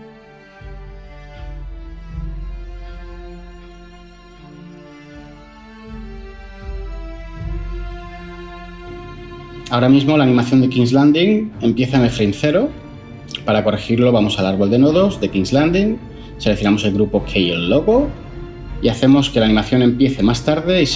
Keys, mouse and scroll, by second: 7.2 0.